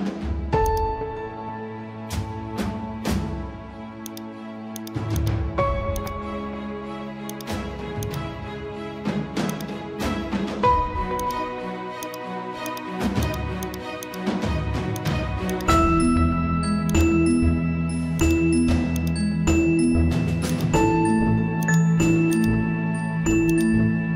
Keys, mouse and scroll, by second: 0.6 click, 1.5 ctrl+z, 2.7 scroll down 1, 4.1 click, 20.0-20.5 scroll down 1, 20.5 click, 20.7 scroll down 1, 21.7-24.1 drag.